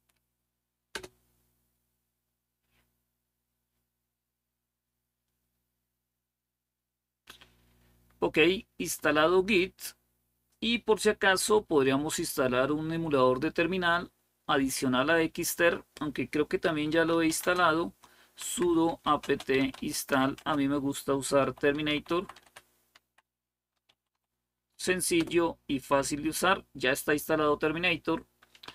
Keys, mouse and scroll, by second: 0.7 Return, 2.8 typing, 4.5-16.4 scroll down 1, 16.2-24.4 typing, 25.0 Return.